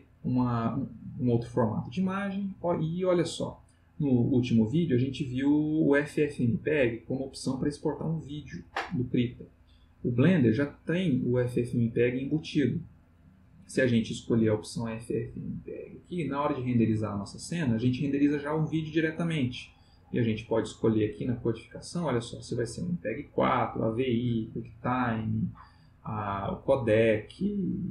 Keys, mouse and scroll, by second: 15.0 click, 16.0 middle click, 19.4 click, 20.0 middle click, 21.8 click.